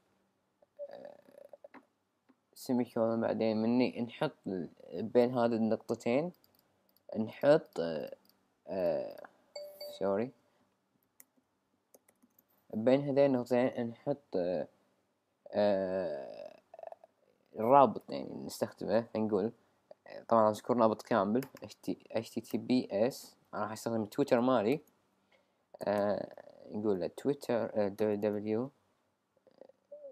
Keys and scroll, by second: 11.2 alt+super+=, 19.6 typing, 21.6 typing, 23.6-24.7 typing, 28.0 typing, 29.6 typing.